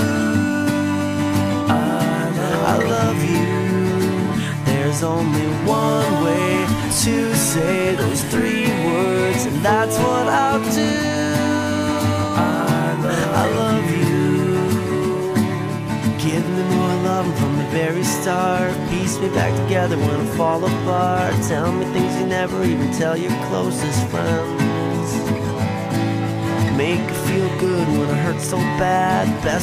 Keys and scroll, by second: 10.9 ctrl+z, 19.5 ctrl+z, 21.7 ctrl+z, 22.6 ctrl+z, 29.3 ctrl+z.